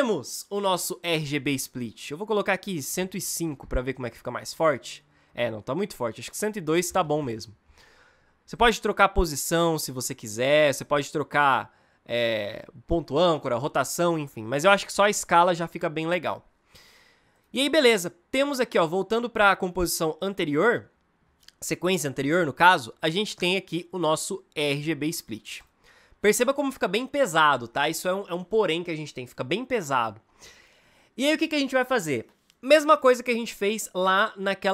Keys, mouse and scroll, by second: 8.3-11.3 drag, 14.5 ctrl+z, 15.0 ctrl+z.